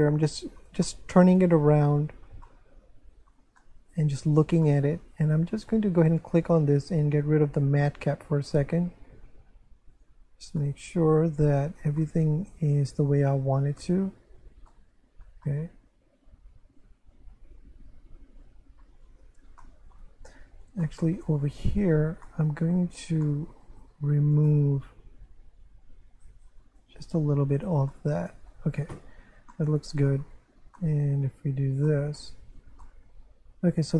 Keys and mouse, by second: 0.8 shift+middle click, 3.6 middle click, 4.6 middle click, 6.1 click, 8.5 click, 9.9 click, 10.6 middle click, 12.0 middle click, 14.7 middle click, 19.6 shift+middle click, 20.8 shift+middle click, 21.7 Tab, 22.3 middle click, 23.2 shift+middle click, 24.4 right click, 25.6 click, 27.5 Tab, 27.9 middle click, 29.5 shift+middle click, 30.8 middle click, 31.3 1, 31.9 shift+middle click, 32.8 shift+middle click.